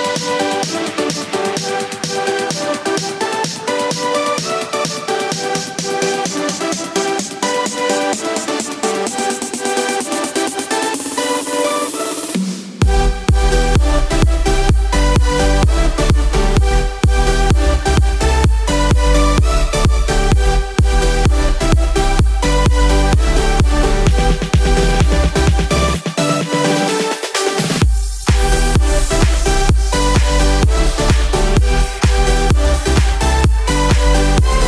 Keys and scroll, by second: 4.8 z, 12.0 ctrl+z, 17.9 ctrl+z, 19.3 ctrl+z, 31.1 z.